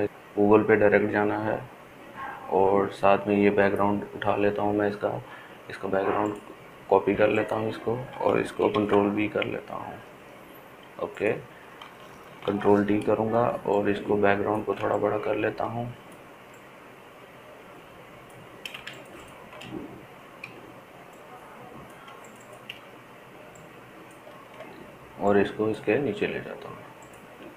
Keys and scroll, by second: 10.0 ctrl+v, 13.8 ctrl+t.